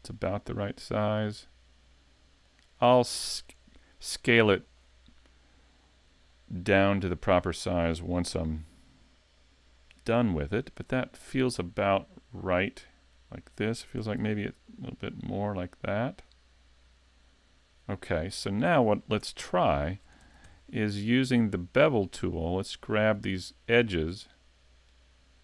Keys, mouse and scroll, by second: 0.3 click, 1.3 click, 3.2 shift+middle click, 4.1 middle click, 4.6 shift+middle click, 6.3 shift+middle click, 10.9 middle click, 14.0 s, 17.0 click, 18.1 middle click, 19.2 Tab, 19.5 scroll up 2, 19.8 shift+middle click, 20.2 ctrl+Tab, 20.8 middle click, 21.8 right click, 22.7 shift+right click, 23.2 middle click, 24.9 shift+right click.